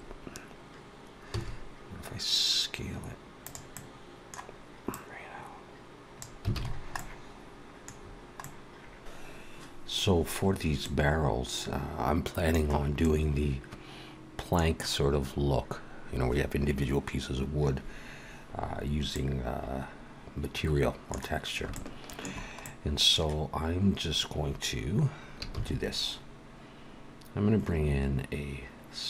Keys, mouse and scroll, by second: 1.2 s, 3.6 middle click, 4.8 click, 6.4 alt+a, 6.5 scroll down 3, 6.8 middle click, 7.8-8.6 scroll down 3, 8.3 middle click, 10.8 middle click, 12.9 middle click, 19.1 middle click, 21.7 shift+middle click, 22.6 middle click, 25.4 shift+a.